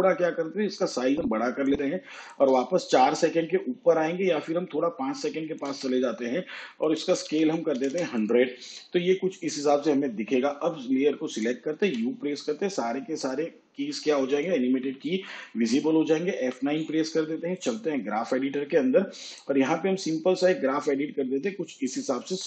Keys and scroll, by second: 7.5 1, 8.0 0, 12.0 u, 16.6 F9.